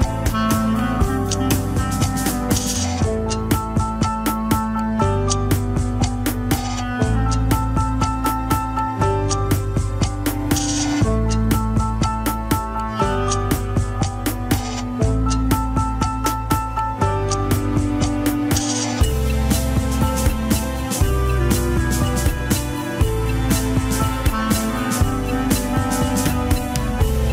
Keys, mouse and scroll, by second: 3.7 scroll down 3, 4.5 alt+z, 4.9 alt+z, 5.7 click, 6.7-7.2 scroll down 2, 7.2 scroll up 1, 8.0 g, 9.0 scroll up 2, 9.2 x, 10.2 alt+z, 10.7 Tab, 12.1 click, 13.6 click, 14.0 scroll down 2, 16.1-17.9 drag, 17.9 scroll up 2, 19.1 click, 25.7-27.2 scroll down 1, 27.2-27.3 ctrl+z.